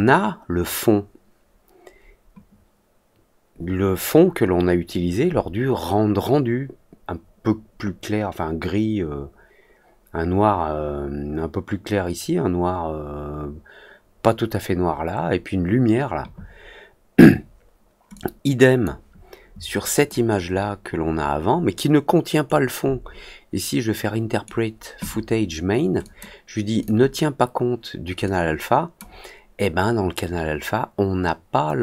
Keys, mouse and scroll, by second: 18.1-18.7 drag, 19.9 click, 22.4-24.4 right drag, 25.9 click, 26.7 click, 28.2 click.